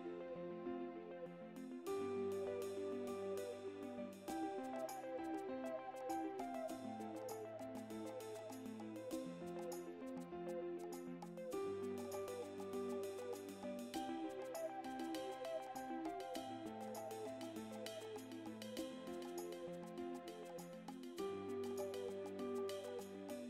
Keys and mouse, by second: 0.4 right click, 3.2 right click, 4.5 right click, 8.4 right click, 9.4 right click, 11.9 right click, 12.5 right click, 14.7 right click, 16.2 right click, 17.1 right click, 18.9 right click, 21.4 right click.